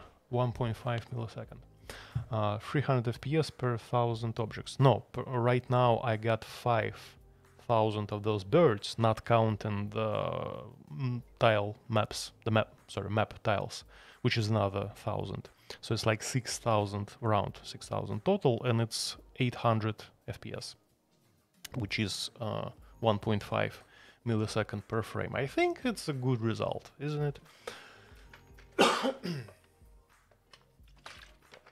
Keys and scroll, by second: 0.0-2.2 typing, 27.2 typing.